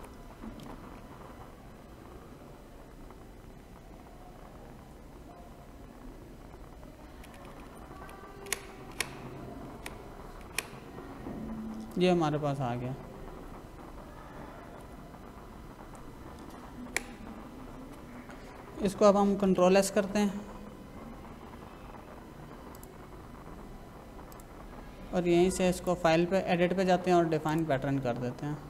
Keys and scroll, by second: 0.5 v, 0.9 Left, 9.7 Right, 10.4 Left, 14.6 ctrl+=, 16.8 Right, 19.4 ctrl+s.